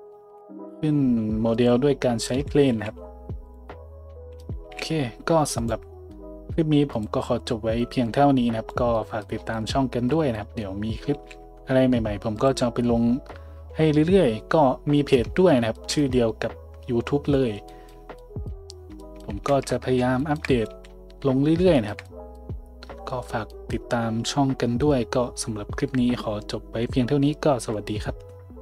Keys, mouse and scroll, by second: 0.2 shift+a, 2.7 g, 4.6 g, 6.9-12.4 drag, 11.1 g, 12.4-28.6 middle drag, 20.7 a.